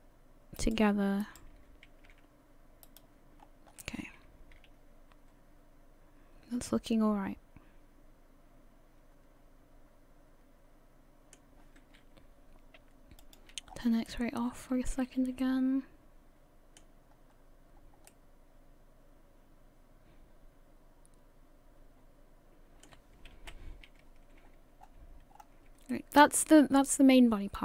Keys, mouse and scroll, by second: 1.2 right click, 2.1 g, 3.4 scroll down 3, 3.7 scroll up 1, 3.8 middle click, 13.2 click, 13.7-14.1 scroll down 7, 14.1 middle click, 15.0 a, 15.2 a, 15.4 middle click, 17.1-17.8 scroll up 3, 17.8-18.5 scroll down 2, 18.1 middle click, 23.4 KP_1, 24.4-25.4 scroll down 4, 25.3-25.7 scroll up 3, 25.9 shift+middle click.